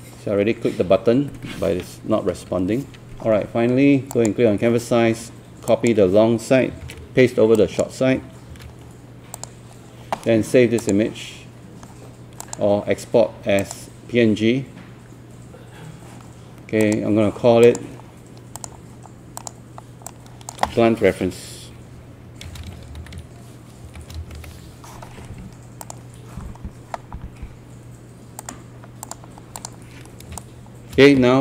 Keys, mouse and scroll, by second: 6.8 ctrl+c, 7.6 click, 8.5 ctrl+v, 9.4 click, 22.3-24.9 typing, 25.8 click, 30.4-31.4 shift+right drag.